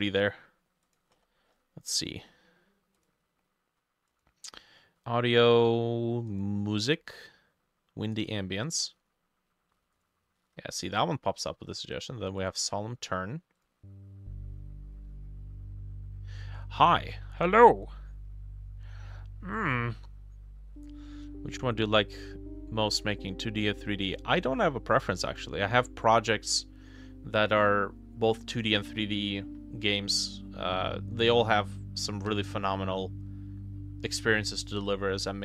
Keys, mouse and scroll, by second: 1.2-2.2 scroll up 10, 2.2-2.5 scroll down 1, 4.1 scroll down 1, 7.0-8.5 scroll up 3, 10.0 ctrl+click, 12.4 ctrl+click.